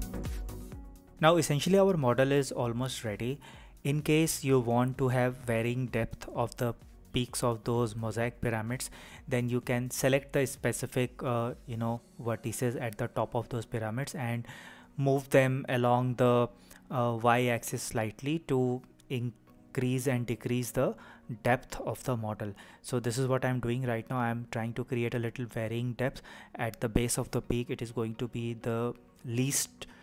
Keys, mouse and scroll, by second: 0.0-0.2 typing, 0.1 click, 0.9-13.6 middle drag, 14.8 click, 16.2 click, 18.1 shift+click, 19.1 shift+click, 20.9 KP_3, 25.7 g, 25.9 y, 27.7 click, 28.0 middle click, 28.9 click, 29.1 shift+click, 29.2 shift+click, 29.5 shift+drag, 29.6 shift+click, 29.9 shift+click.